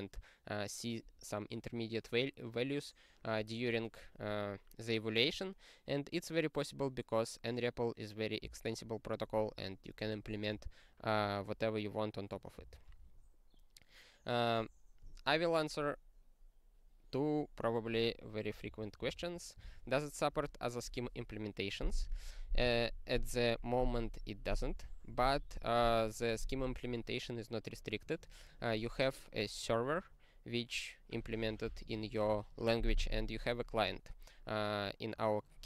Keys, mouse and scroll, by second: 12.6 ctrl+n, 12.7 ctrl+n, 18.7 ctrl+n, 19.0 ctrl+space, 19.1 ctrl+n, 19.6 ctrl+g, 24.1-27.9 scroll up 42, 27.9-28.8 scroll up 1, 28.8-35.6 scroll up 1.